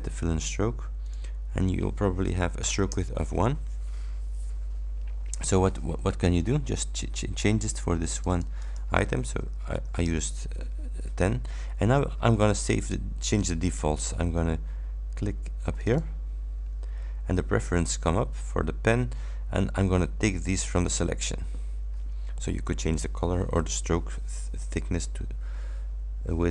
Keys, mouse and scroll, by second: 1.2 click, 3.0 shift+Return, 8.2 click, 10.2 shift+Return, 15.8 click, 20.5 click.